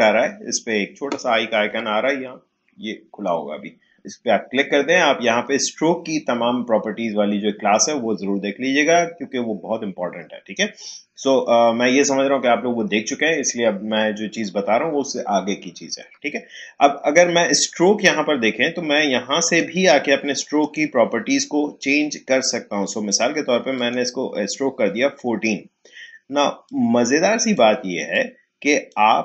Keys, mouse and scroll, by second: 19.4 click, 23.7 click, 26.6-29.2 drag.